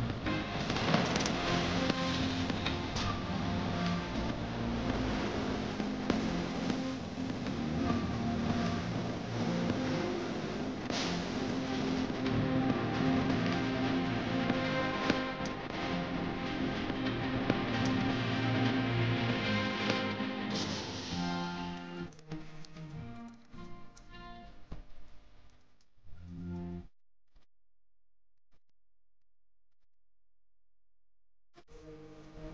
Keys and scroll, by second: 10.0 F3, 12.0 ctrl+k.